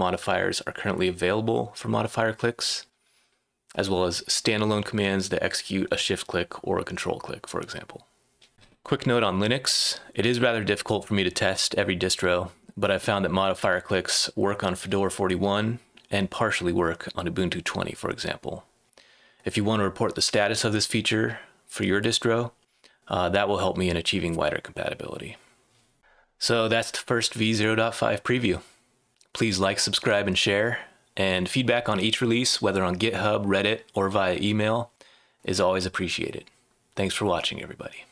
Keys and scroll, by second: 8.3-9.0 typing.